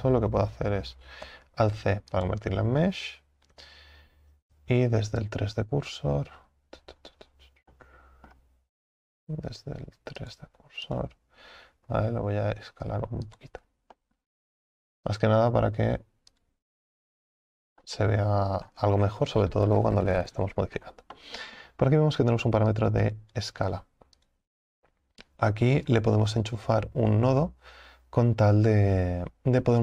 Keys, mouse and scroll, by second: 2.3 alt+c, 3.6 Tab, 4.3 a, 4.5 a, 11.0 click, 11.9 s, 13.6 Tab, 14.0-15.2 middle drag, 15.2 click, 16.3-17.8 drag, 17.8-18.6 middle drag, 18.6 scroll up 4, 19.0 scroll down 5, 19.4 scroll up 1, 21.1 scroll up 2, 23.4 click.